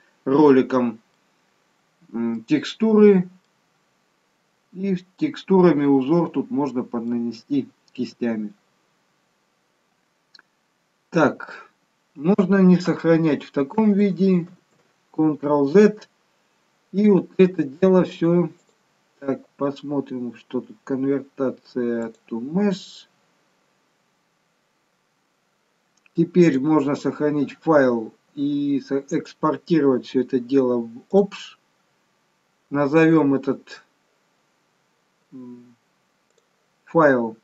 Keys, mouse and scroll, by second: 1.1 scroll up 1, 1.2 middle click, 2.9-3.4 scroll up 1, 3.4 middle click, 7.1 middle click, 9.1-10.1 scroll down 1, 12.8 ctrl+z, 13.9 ctrl+z, 14.6 ctrl+z, 18.6 click, 26.4 click.